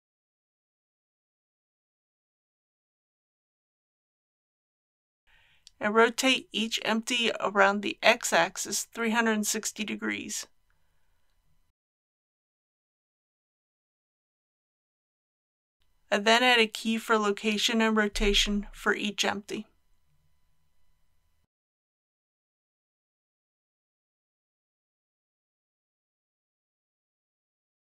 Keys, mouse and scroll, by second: 0.7 shift+g, 0.7 shift+y, 2.5 click, 2.9 shift+middle click, 5.7 click, 7.1-8.7 typing, 10.8 click, 11.7-15.1 typing, 12.9 click, 14.2 click, 17.3 click, 18.6 i, 19.3-27.8 drag.